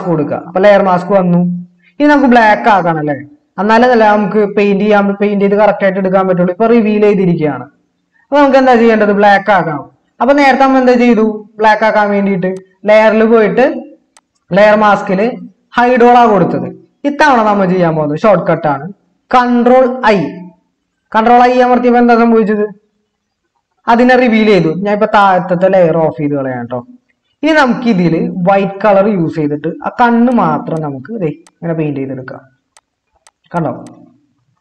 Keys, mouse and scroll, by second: 20.0 ctrl+i.